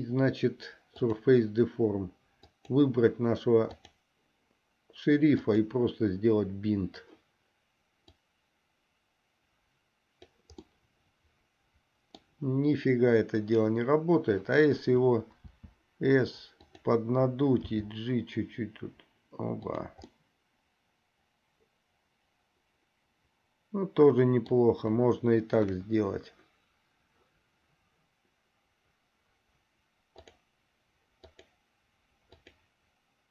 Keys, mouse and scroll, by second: 2.7 click, 5.5 click, 8.4-10.5 drag, 10.9-12.6 middle drag, 15.6 s, 17.8 g, 20.4-24.9 middle drag, 25.7 KP_1, 30.4 click, 31.5 click, 32.5 click.